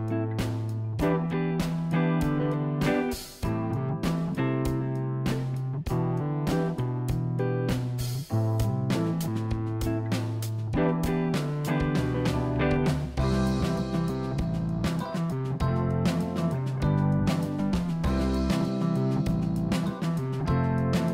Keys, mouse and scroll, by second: 0.2-1.9 scroll up 1, 4.0 click, 4.4 click, 4.5 click, 5.1-6.4 middle drag, 6.4 click, 7.6 Delete, 9.1 click, 10.2 click, 11.0 click, 13.7 s, 15.4 click, 16.0-16.5 scroll down 2, 16.7-18.4 middle drag, 19.8 KP_1.